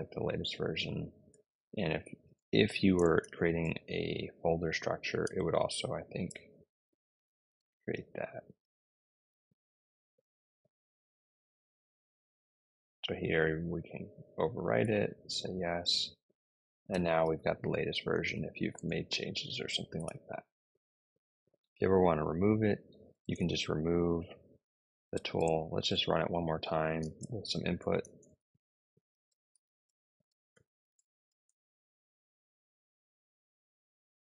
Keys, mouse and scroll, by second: 0.0-9.1 typing, 9.6 Return, 14.2 y, 14.7 Return, 16.5-18.6 typing, 22.8-23.6 typing, 24.8 BackSpace, 25.0 BackSpace, 25.1 BackSpace, 25.3 BackSpace, 25.9 Up, 26.9 space, 27.9 shift+', 29.1-32.2 typing.